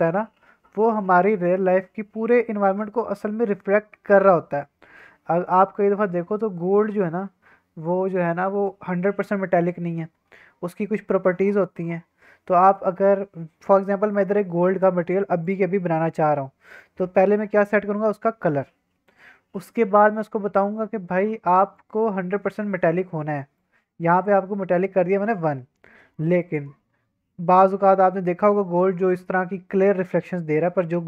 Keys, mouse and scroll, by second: 14.1 middle click, 14.6-14.9 middle drag, 15.4 click, 19.8 middle click, 21.7 click, 23.5 click, 24.8-25.1 scroll down 2, 25.1 middle drag, 25.4-25.8 scroll up 2, 25.8 middle click, 26.3-26.8 middle drag, 26.8-28.6 drag, 28.6-29.5 middle drag, 29.9-31.0 middle drag.